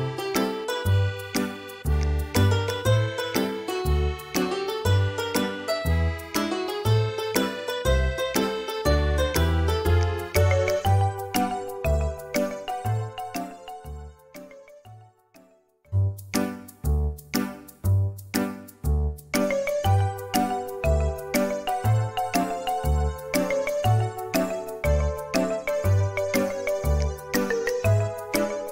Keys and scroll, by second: 9.9 space, 14.6 r, 19.5 space, 21.3 Delete, 27.5 b.